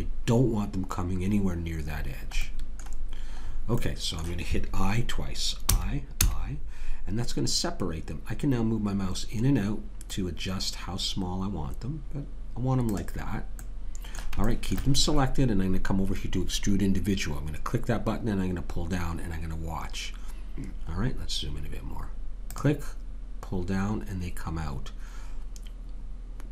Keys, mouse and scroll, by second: 0.0-3.5 middle drag, 5.7 i, 13.6-16.7 middle drag, 20.9-22.5 middle drag, 22.5 click.